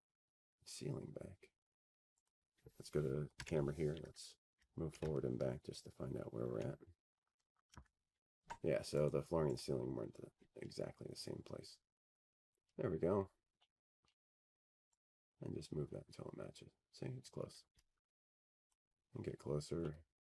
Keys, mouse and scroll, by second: 0.7 click, 4.1 click, 5.1 click, 7.9 click, 8.9 click, 10.2 c, 10.6 scroll, 11.2-13.2 scroll, 13.2 F3, 14.7 right click, 15.2 click, 16.2-16.8 scroll, 17.0 scroll, 17.4 middle click, 17.6 middle click, 17.6-18.9 scroll, 19.6 scroll.